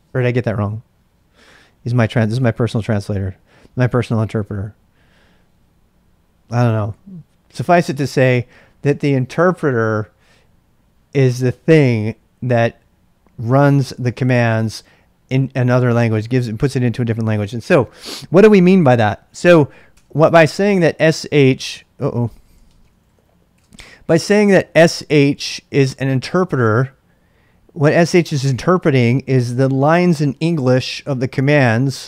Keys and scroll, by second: 19.9 Return, 22.2-24.0 typing.